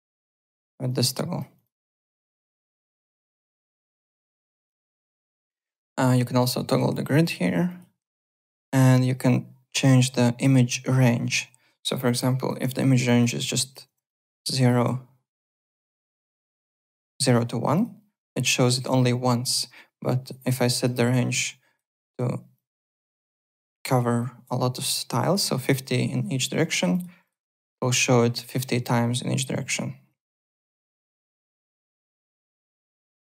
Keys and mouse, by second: 0.0 click, 1.5 click, 2.3 l, 2.7 alt+Tab, 5.4 click, 6.3 click, 8.9 click, 10.8 click, 12.2 click, 12.7 KP_1, 13.0 click, 13.2 KP_1, 13.5 click, 13.8 KP_0, 14.0 click, 14.7 KP_0, 15.4 click, 15.8 KP_0, 16.3 click, 16.6 KP_0, 16.8 click, 20.3 click, 20.8 click, 22.5 click, 23.3 click, 24.2 click, 26.7 click, 30.9 alt+Tab, 31.2 alt+click.